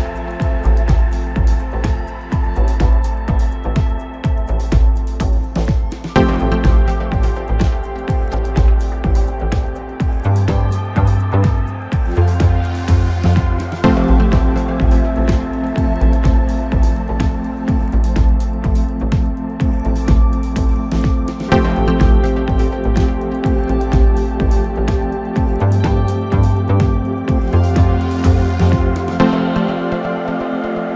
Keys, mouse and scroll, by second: 1.1-3.1 middle drag, 3.1 Tab, 3.5-6.6 middle drag, 6.9 Tab, 8.4 ctrl+3, 9.4 scroll up 2, 10.0-11.1 middle drag, 11.1 Tab, 11.5-12.9 middle drag, 12.9 ctrl+r, 16.2 Tab, 16.6-19.1 right drag, 19.1-22.1 middle drag, 22.7-23.7 drag, 23.7 middle click, 24.3 Tab, 24.8 middle click, 25.7 click, 26.5 KP_3, 27.8 g, 29.7 g.